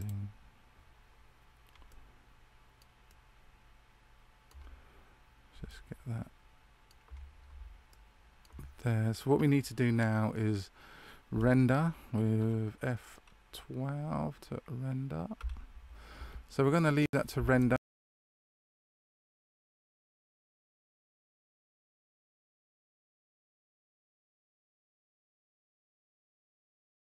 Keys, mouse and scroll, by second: 1.8 shift+middle click, 3.5 shift+middle click, 5.7 shift+middle click, 8.0 shift+middle click.